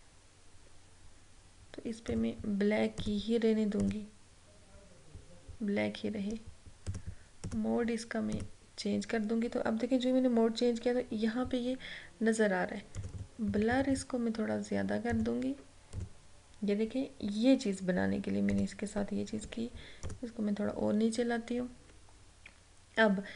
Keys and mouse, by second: 2.2 click, 6.9 click, 13.0 click, 18.6 click, 19.4 Down, 20.1 click.